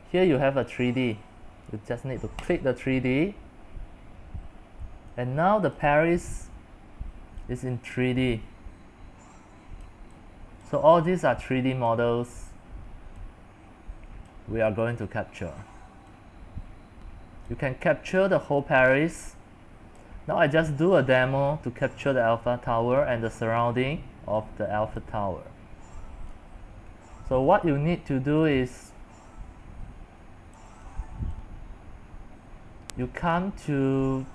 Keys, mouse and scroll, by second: 0.0-3.8 drag, 3.8 scroll up 5, 4.0 middle click, 4.0 scroll, 4.1 scroll up 2, 4.4-5.9 middle drag, 5.9 click, 6.6-9.8 middle drag, 8.7 scroll, 9.8-12.7 drag, 12.7-13.1 scroll down 1, 13.1-14.3 middle drag, 14.3 click, 14.7-15.8 middle drag, 15.8-16.3 scroll down 3, 16.3-17.7 middle drag, 17.7-22.3 drag, 22.3-25.2 middle drag, 22.3-22.8 scroll, 23.2-23.6 scroll, 25.2-28.7 drag, 28.9-30.2 drag, 30.6-34.3 drag.